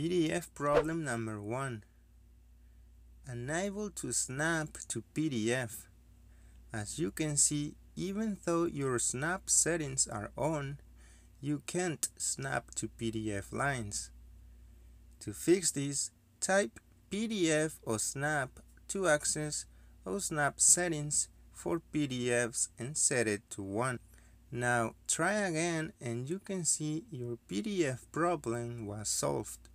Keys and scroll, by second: 2.3-3.2 typing, 3.2 Return, 15.9 Escape, 19.1 typing, 21.3 Return, 21.3-22.1 typing, 22.6 Return, 25.9 1, 26.4 Return.